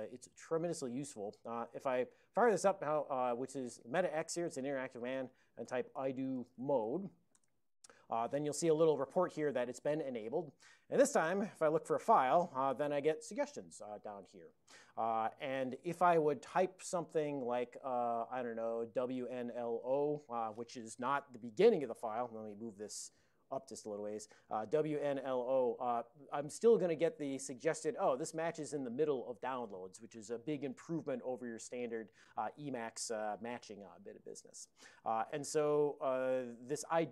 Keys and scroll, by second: 1.6 alt+x, 5.6-7.4 typing, 7.4 Return, 11.5 ctrl+x, 11.8 ctrl+f, 19.0-20.4 typing, 23.2 super+Up.